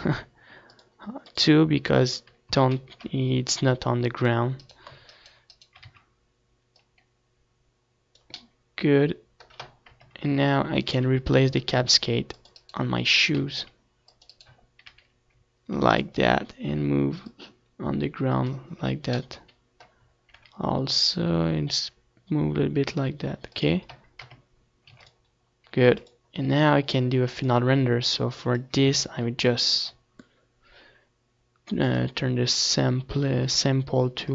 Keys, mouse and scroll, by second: 0.1 z, 0.7 a, 1.1 c, 2.8-5.4 right drag, 4.2 z, 4.8-6.8 drag, 6.5 right click, 6.8 middle click, 7.4 middle click, 8.0-9.8 typing, 10.7-12.0 drag, 11.5 c, 12.8 r, 14.0 click, 14.4 z, 14.7 z, 16.4 click, 16.9 z, 17.4-20.0 middle drag, 18.5 r, 21.8-23.5 drag, 22.3 KP_0, 22.9 ctrl+s, 23.9 ctrl+s, 26.4-34.3 drag, 26.9 ctrl+s.